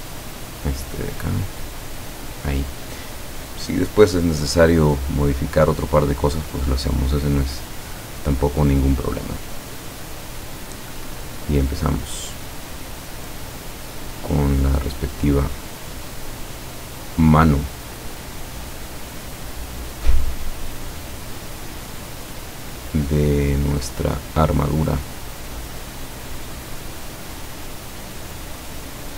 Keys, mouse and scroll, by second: 0.2 click, 1.5 click, 6.2 click, 11.5 click, 14.1 click, 16.3 click, 21.5 click, 25.7 click, 26.7 click, 28.6 click.